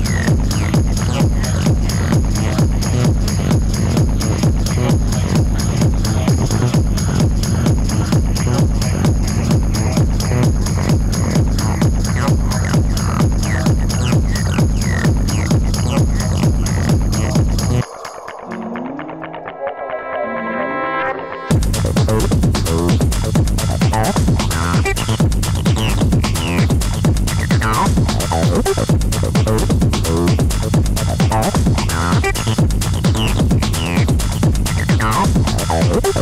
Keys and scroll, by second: 25.0 ], 25.9 ], 34.7 ].